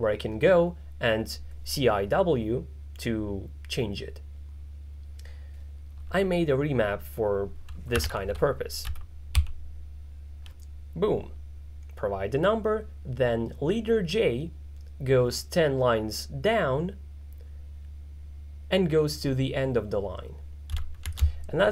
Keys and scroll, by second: 7.8-9.4 typing, 21.1-21.7 typing.